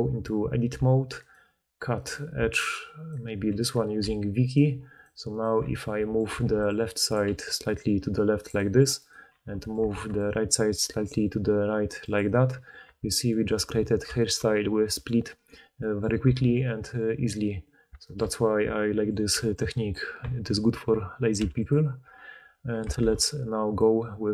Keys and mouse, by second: 1.1 alt+click, 1.3 alt+middle click, 1.9 alt+click, 2.1 alt+middle click, 2.5 alt+click, 2.7 alt+middle click, 2.9 alt+click, 3.0-4.0 alt+middle drag, 4.0 v, 4.9 click, 5.3 click, 5.5 4, 6.4 ctrl+d, 6.8-8.9 middle drag, 8.9 click, 9.0-16.1 middle drag, 9.2 4, 9.9 ctrl+d, 12.9 Tab, 16.3 alt+a, 19.1-22.0 drag, 19.3 b, 21.3 x, 22.0 middle click, 22.9 shift+a.